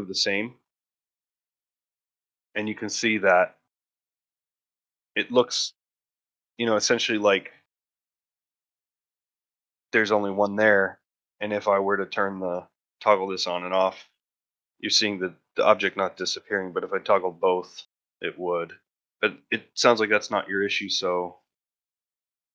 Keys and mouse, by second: 0.0 click, 0.5 click, 1.0 click, 1.7 shift+click, 2.6 middle drag, 3.0 shift+middle drag, 3.3 ctrl+middle drag, 3.7 shift+middle click, 3.9-4.2 middle drag, 4.4 shift+middle drag, 4.7-5.0 middle drag, 5.7 middle drag, 6.1 ctrl+middle click, 6.4 shift+middle drag, 6.7 middle drag, 6.9 middle drag, 7.9-8.4 shift+middle drag, 8.5 shift+middle drag, 9.3-9.9 middle drag, 10.0 shift+middle click, 11.8 click, 12.3 click, 12.8 click, 13.3 click, 13.5 click, 13.8-14.8 drag, 14.9 click, 15.3 click, 16.4 click, 16.7 click, 17.1 click, 17.6 click, 17.9 click, 18.3 click, 18.6 click, 21.8 x.